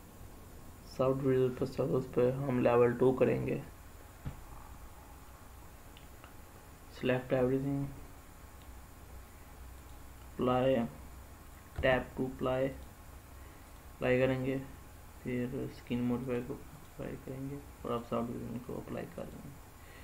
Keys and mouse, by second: 3.6 click, 9.6 click, 11.5 Tab, 12.5 click, 16.0-16.6 drag, 17.6-19.1 drag.